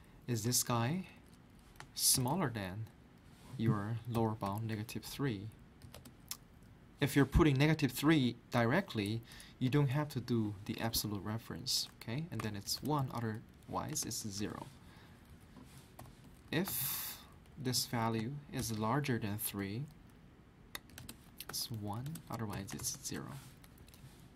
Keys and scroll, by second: 1.7-2.6 typing, 4.1-4.4 typing, 5.6-6.3 typing, 10.7 typing, 12.1-14.5 typing, 15.1 Right, 15.3 Up, 15.7-17.2 typing, 17.3 Left, 17.5 Left, 18.3-19.1 typing, 20.9-22.8 typing, 23.1 Return, 23.6 Right.